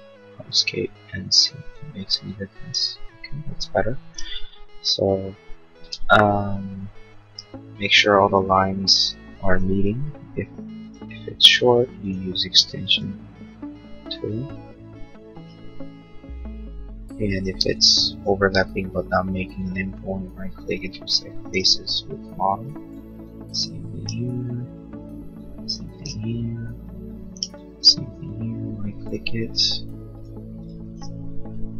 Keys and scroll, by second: 17.3 space.